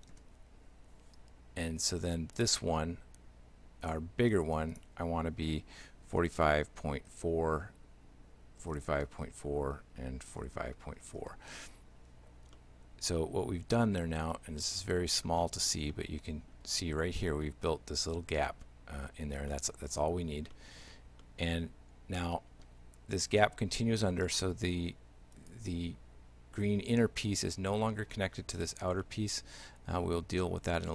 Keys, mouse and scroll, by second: 2.4 right click, 4.7 click, 12.6 shift+middle click, 14.4 middle click, 14.9-15.5 scroll up 3, 15.5 middle click, 16.0 middle click, 19.5 shift+middle click, 20.6 middle click, 21.2 shift+middle click, 24.3 shift+middle click, 25.4 right click, 29.0 shift+middle click.